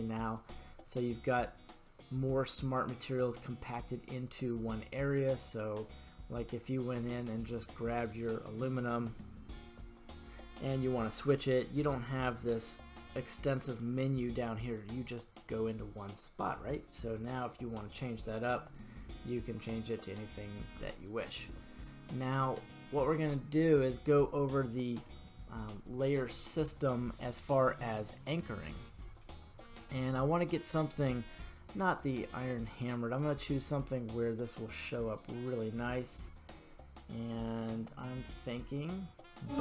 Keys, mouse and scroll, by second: 8.2-10.2 scroll down 2, 14.6-19.7 drag, 27.8-29.1 middle drag, 32.7-39.6 drag.